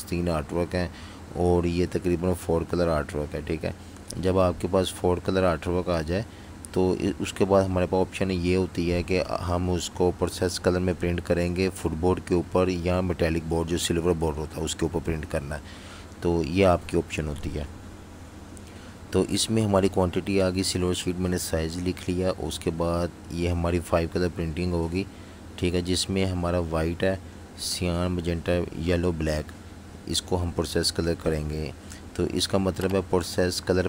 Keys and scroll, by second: 1.4 v, 15.4 v, 33.1 super+-, 33.2 super+-.